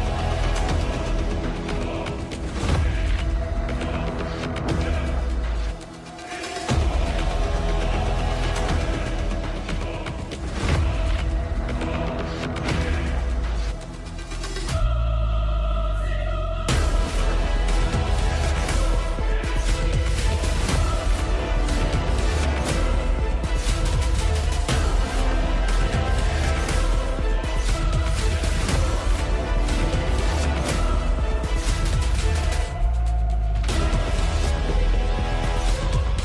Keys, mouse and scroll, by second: 12.0 right click.